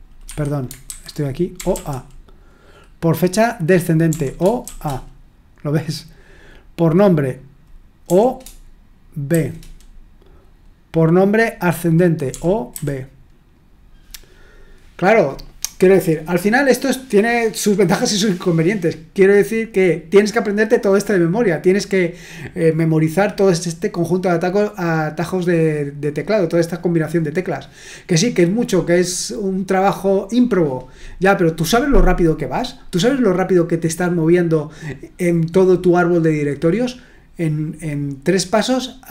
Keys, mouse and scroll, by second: 0.2 Escape, 0.8 super+h, 1.5 typing, 4.1-4.6 typing, 8.0 typing, 9.3 typing, 12.3-12.7 typing.